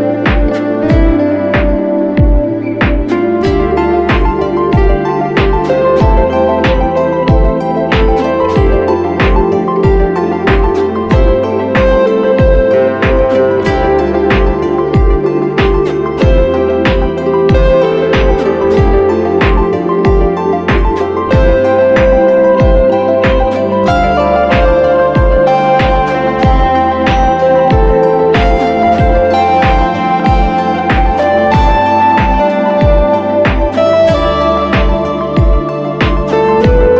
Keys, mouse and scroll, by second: 23.7-24.7 scroll up 1.